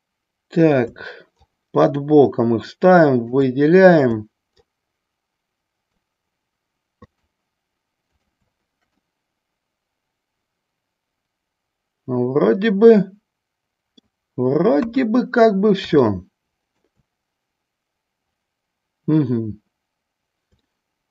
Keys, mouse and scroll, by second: 1.8-3.5 shift+drag, 5.0-6.3 shift+drag, 7.1 shift+click, 9.3-14.2 middle drag, 14.9 KP_1, 16.1 shift+middle click, 20.9 shift+middle click.